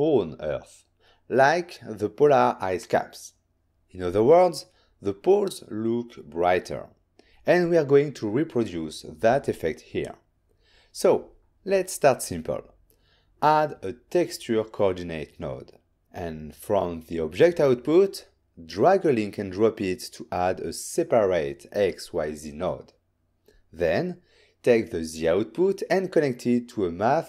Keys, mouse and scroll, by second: 6.6 click, 8.0 middle click, 9.7 shift+a, 10.5 click, 11.0-13.1 typing, 13.7 Return, 15.3 click.